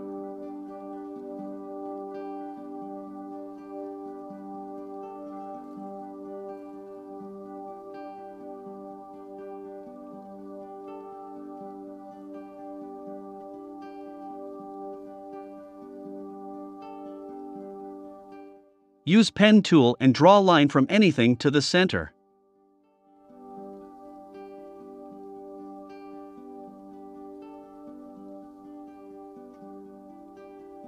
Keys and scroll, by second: 0.0 i, 1.5 v, 2.6-3.5 typing, 9.0 1, 9.5 5, 9.7 Return, 11.9 super+c, 12.2 super+f.